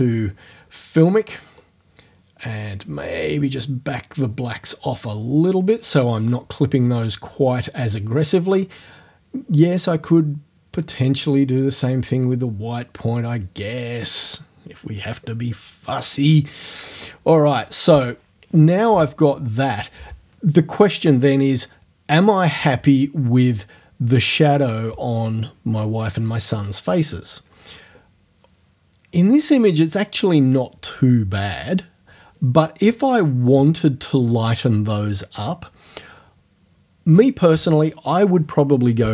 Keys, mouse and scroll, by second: 1.6-5.9 drag, 10.8-13.4 drag, 17.9 o.